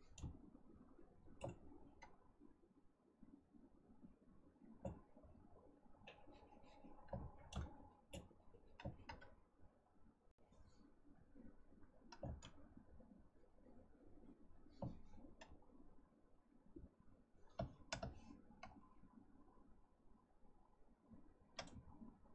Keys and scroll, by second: 7.1 ctrl+z, 12.2 ctrl+z.